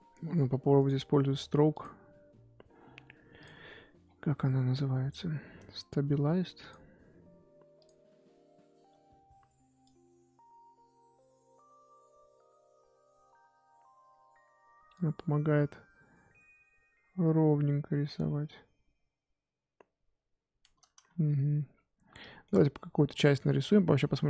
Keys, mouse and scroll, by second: 1.7-4.0 scroll down 3, 10.9-20.9 drag, 20.9 ctrl+z, 21.2-21.7 scroll down 4, 21.7-22.2 scroll up 6, 22.2-24.2 shift+middle drag.